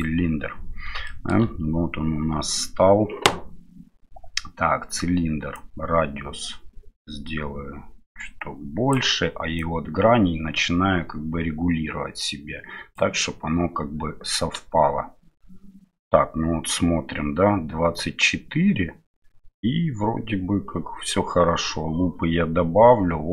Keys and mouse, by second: 1.1 shift+click, 5.5-8.9 drag, 9.5-12.9 drag.